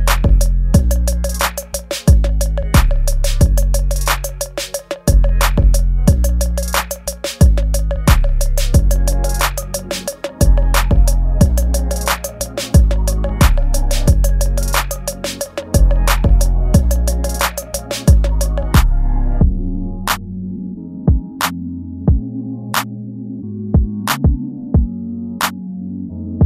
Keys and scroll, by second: 0.0-0.9 typing, 0.6 ctrl+z, 1.1 ctrl+z, 1.9 ctrl+z, 3.4 space, 3.9 ctrl+z, 4.8 space, 8.4 space, 9.5 space, 9.9 space, 10.5 space, 11.2 ctrl+z, 12.4 space, 13.3 space, 13.9 space, 14.4 ctrl+z, 15.0 ctrl+z, 15.4 ctrl+z, 15.6 space, 15.9 ctrl+z, 16.0 space, 16.6 ctrl+z, 16.9 space, 18.4 space, 18.9 ctrl+s, 19.6 space, 20.4 space, 22.4 space, 25.6 space.